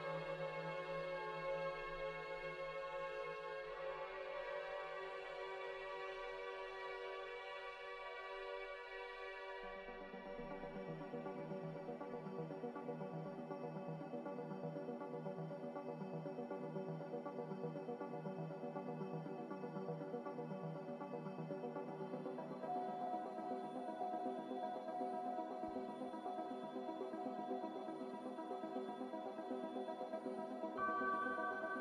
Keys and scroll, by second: 0.0 z, 2.7-4.6 typing, 19.2 ctrl+z, 22.3 Return.